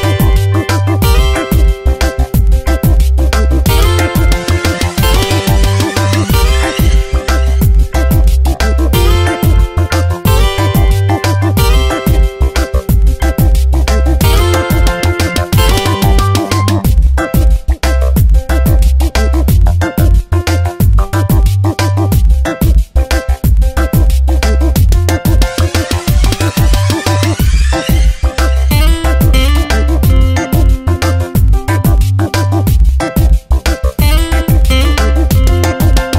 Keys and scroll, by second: 0.5 space, 6.2 ctrl+Return, 6.8 Delete, 7.2 ctrl+d, 8.9 space, 13.2 ctrl+z, 20.2 ctrl+z, 26.1 ctrl+Return, 26.6 Delete, 27.0 ctrl+d, 34.6 ctrl+Return, 35.2 Delete, 35.5 ctrl+d.